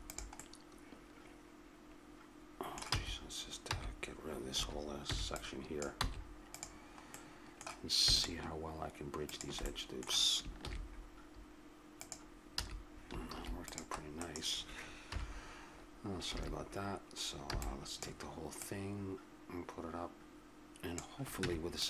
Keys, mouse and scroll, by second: 1.0-2.3 middle drag, 2.9 c, 5.0 b, 6.0 x, 7.1-8.4 middle drag, 9.9-11.0 middle drag, 10.6 ctrl+e, 12.6 a, 13.2 ctrl+r, 15.1 KP_7, 16.3 a, 17.5 b, 18.6 click, 19.7 click, 21.4 Tab.